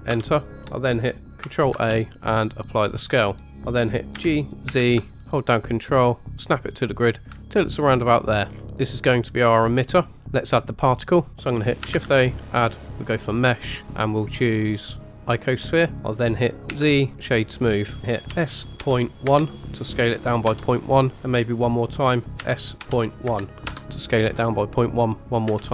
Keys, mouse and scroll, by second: 0.6 shift+middle click, 0.6 scroll up 2, 1.7 ctrl+a, 3.5-4.1 scroll down 3, 4.1 g, 8.5 scroll down 2, 8.6 shift+middle click, 8.6-9.9 scroll up 2, 10.9-11.3 middle drag, 11.9 shift+a, 15.9 click, 16.7 z, 18.3 s, 22.3 s, 24.3-25.4 scroll up 3, 25.4 KP_Decimal.